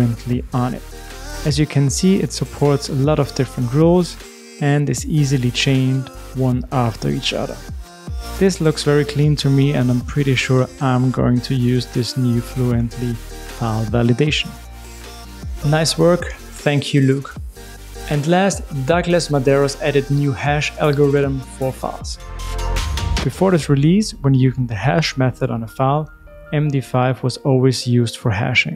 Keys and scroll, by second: 0.4 super+v, 27.6 super+b.